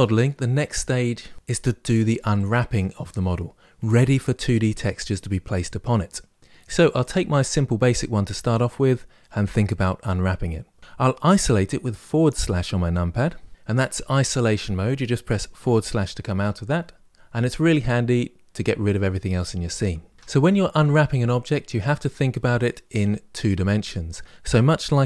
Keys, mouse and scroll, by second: 6.7 click, 12.9 KP_Divide, 13.5-15.4 middle drag, 15.4 KP_Divide, 16.4 KP_Divide, 17.1-20.1 middle drag, 20.1 Tab, 21.6-24.6 middle drag.